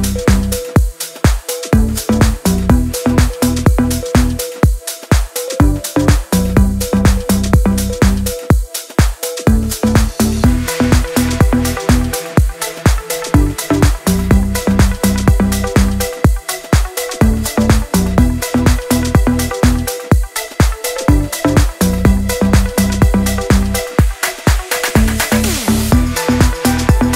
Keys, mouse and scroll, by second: 3.6 click, 4.4-4.8 scroll down 1, 4.8-15.4 drag, 16.8-18.7 alt+drag, 18.7 Down, 22.1 ctrl+a, 23.6 click, 25.4 ctrl+z, 26.0 click, 27.0 ctrl+d.